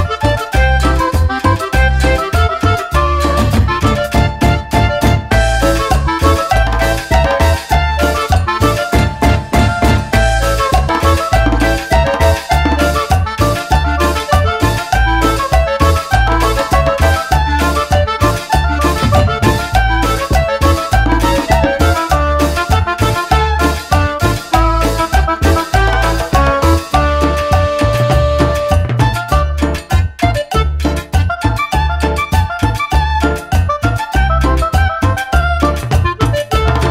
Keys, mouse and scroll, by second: 0.7 click, 1.2 click, 2.3 click, 3.5 click, 4.1 click, 5.3 click, 6.4 click, 7.9 middle click, 8.5 scroll up 1, 10.7 click, 10.8 click, 11.9 click, 12.7 click, 13.4 middle click, 13.9 middle click, 13.9 scroll down 1, 14.9 scroll up 1, 15.3 middle click, 15.9-16.2 scroll up 1, 16.8 scroll up 1, 17.7 middle click, 18.1 middle click, 21.3 middle click, 21.7 middle click, 22.5 click, 22.9 click, 23.6 click, 24.7 click, 25.2 click, 26.5 click, 28.1 click, 28.7 click, 29.7 click, 30.5 click, 31.3 click, 32.8 click, 33.6 click, 34.1 click, 35.5 click.